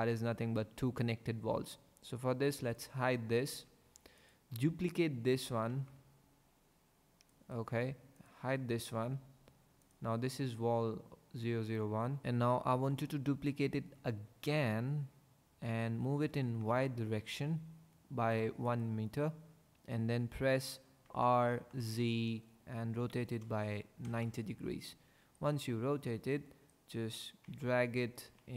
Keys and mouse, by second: 2.7 click, 3.5 h, 5.7 shift+d, 8.2 click, 9.0 h, 12.2 Tab, 14.3 shift+d, 16.6 y, 18.6 click, 21.1 r, 21.7 z, 23.2 KP_9, 23.3 KP_0, 24.1 KP_Enter, 27.5 g, 28.2 x.